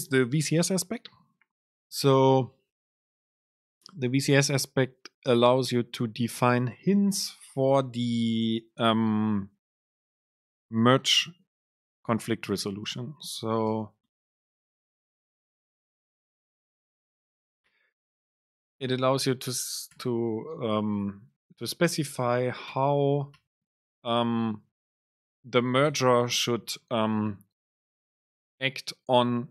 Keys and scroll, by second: 13.8 super+space, 15.9 BackSpace, 17.4 Down, 17.7 super+space, 20.7 alt+Down, 21.5 super+space, 23.4 Return, 24.3 BackSpace, 24.6 super+space.